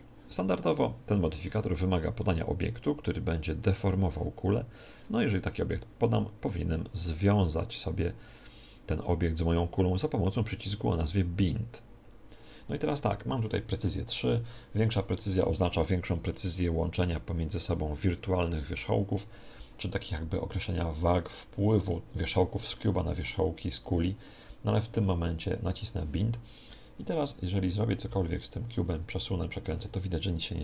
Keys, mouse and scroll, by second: 2.6 click, 7.4-9.7 drag, 25.4 click, 27.4 right click, 28.0 s, 29.1 r.